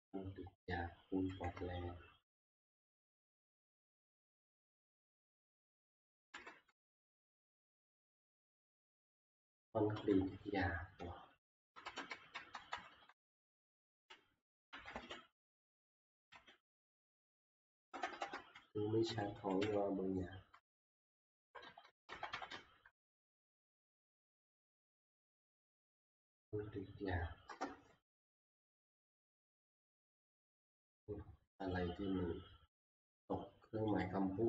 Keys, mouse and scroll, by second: 1.3 Down, 1.5-2.4 Left, 3.0 Left, 4.8 `, 6.3 Left, 6.7 ctrl+v, 10.3-11.2 Right, 11.4 Right, 11.7 Left, 12.0 Left, 12.3 Right, 12.5 Right, 12.7 Right, 12.9 Right, 13.1 Right, 13.3 Right, 14.5-16.3 typing, 17.8-19.6 typing, 21.2 Right, 21.5 Right, 21.6 Right, 21.6-22.6 typing, 23.1 Delete, 23.3 Delete, 23.5 Delete, 29.5 Return, 29.5 z, 30.5 scroll, 31.7 middle click, 31.7 click, 32.5 middle click, 32.5 middle click, 32.6 middle click, 34.0 click.